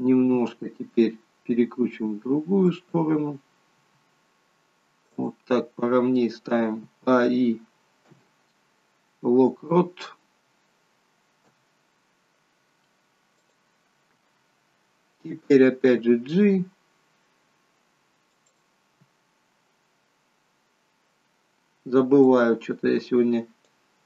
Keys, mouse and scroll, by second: 0.4 r, 3.9 r, 7.3-8.2 a, 8.2 i, 11.6 i, 16.2 g, 22.4 click.